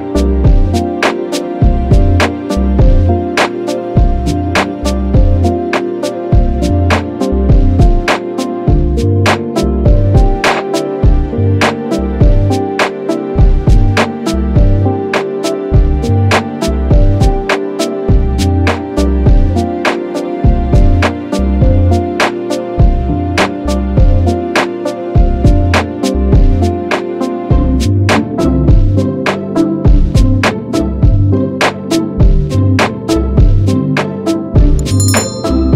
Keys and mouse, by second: 0.1 ctrl+click, 5.3 ctrl+d, 6.8 ctrl+click, 11.7 shift+Up, 12.3 shift+Up, 13.1 shift+Up, 13.7 Down, 14.1 Down, 15.3 Down, 21.2 Delete, 22.7 ctrl+d, 27.5 ctrl+0, 34.4 ctrl+=, 35.3 ctrl+-.